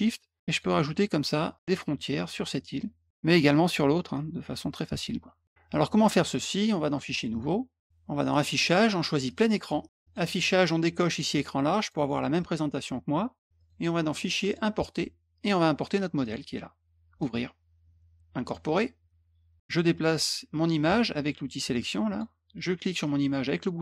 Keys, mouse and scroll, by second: 0.4 shift+click, 1.5 shift+click, 2.5 shift+click, 4.1 shift+click, 6.8 click, 7.3 click, 8.3 click, 9.2 click, 10.0 click, 11.8 click, 13.5 click, 14.4 click, 16.2 click, 17.2 click, 18.4 click, 22.1 click, 23.0-23.8 drag.